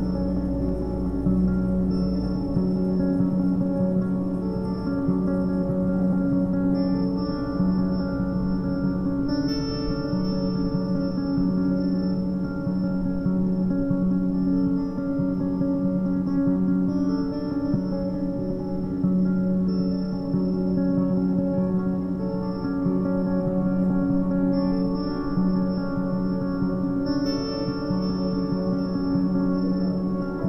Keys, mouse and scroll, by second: 0.0-1.5 shift+middle drag, 1.5 KP_1, 2.0-2.5 scroll down 3, 2.5 z, 2.8 b, 3.7 g, 6.3 a, 6.4 a, 6.5-9.5 middle drag, 9.7 z, 10.2 z, 10.8-11.8 shift+middle drag, 11.8 a, 12.0 a, 17.7 ctrl+3, 18.2-19.9 right drag, 19.9 click, 20.4 Tab, 21.1 KP_1, 21.7-22.6 scroll up 1, 22.6 a, 22.8 a, 23.2 ctrl+r, 26.5 3, 26.6 click, 27.1 g, 28.4 Tab, 29.6 Tab, 30.0 a.